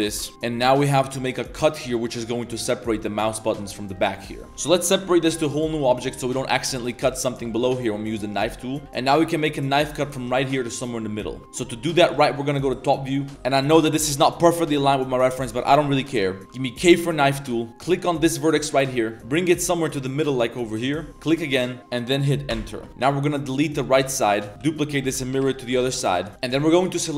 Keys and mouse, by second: 0.2 click, 0.3 Tab, 0.3 1, 0.7 click, 1.1 click, 2.0 drag, 2.0 middle drag, 2.0 right drag, 3.8-5.0 typing, 3.9 click, 5.8 Tab, 6.2 click, 6.6 g, 7.2 click, 7.4 Tab, 7.5 middle click, 8.8 k, 8.9 k, 11.4 KP_7, 12.0 z, 12.2 shift+middle click, 13.1 shift+middle click, 16.8 k, 22.9 KP_7, 22.9 z, 22.9 a, 22.9 b, 24.0-25.0 typing, 26.3 ctrl+z, 26.3 2, 26.4 alt+click, 26.8 middle click.